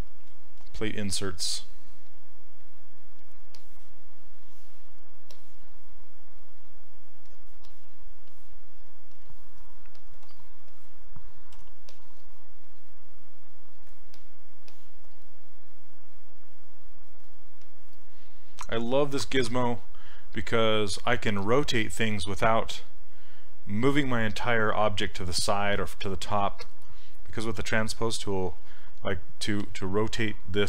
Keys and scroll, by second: 11.6 w.